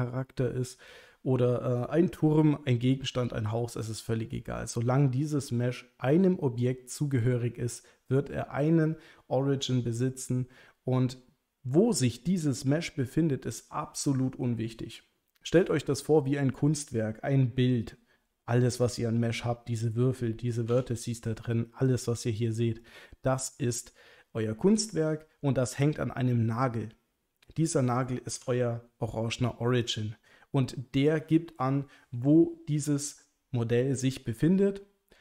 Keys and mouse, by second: 20.7 Tab, 22.0 click, 28.4 Tab, 29.8 click.